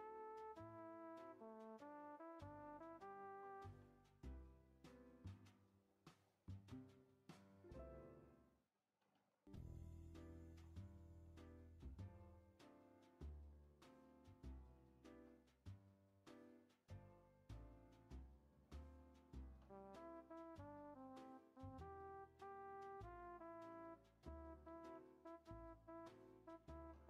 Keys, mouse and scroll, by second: 1.3 middle click, 2.2 click, 3.1 ctrl+a, 5.9 middle click, 6.5 scroll down 2, 6.7 middle click, 7.6 Tab, 8.0 Tab, 8.2 middle click, 8.6 click, 9.1 ctrl+a, 10.9 click, 11.5 ctrl+a, 14.6 click, 15.0 ctrl+a, 17.9-18.9 shift+middle drag, 18.9 click, 19.4 ctrl+a, 23.4 shift+middle click, 23.7 scroll up 6, 24.3 click, 24.7 ctrl+a, 26.0 scroll down 3, 26.4 scroll up 3, 26.7 ctrl+a.